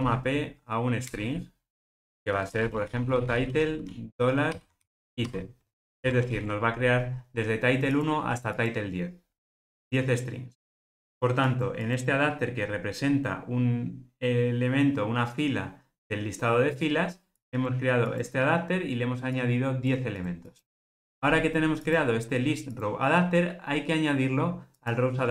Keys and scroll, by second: 1.2 Return, 5.9 alt+super+l.